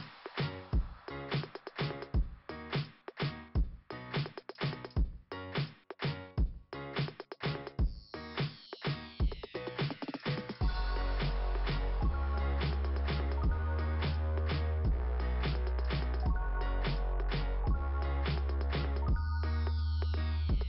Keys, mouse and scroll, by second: 0.0-1.4 typing, 5.0 click, 5.2 click, 5.5 click, 5.8 click, 8.2 click, 11.1 scroll down 2, 16.4 click.